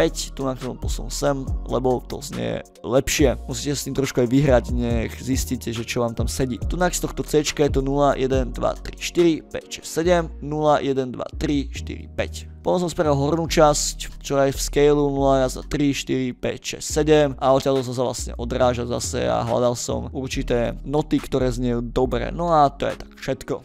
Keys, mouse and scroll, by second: 3.4 click, 3.4-3.8 scroll down 1, 6.4 scroll up 1, 6.6 click, 11.8 drag, 13.1 click, 16.9-17.5 drag, 17.5 click, 17.8 click, 18.5 drag, 19.1-19.4 drag, 19.5 click, 20.0 click, 21.1 click, 21.5 ctrl+middle click, 22.1 middle click, 23.5 click.